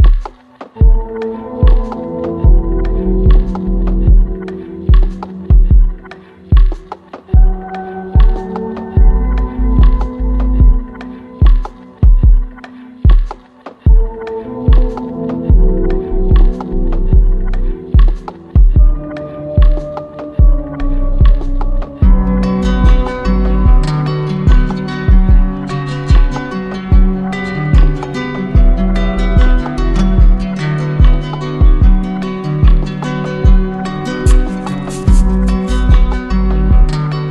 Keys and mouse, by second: 5.1-6.2 drag, 8.7-9.8 drag, 10.8-11.9 drag, 13.4-14.5 drag, 16.1-17.2 drag, 19.7-20.8 drag, 22.1-23.2 drag, 26.6 click, 31.2 click, 34.7 click, 36.6-37.3 drag.